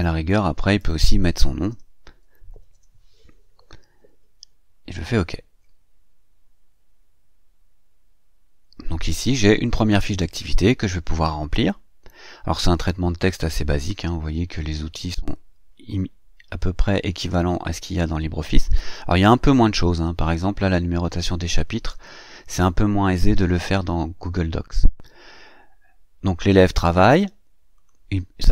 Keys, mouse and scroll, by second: 0.6 BackSpace, 1.8-3.1 typing, 5.0 click, 27.6 click.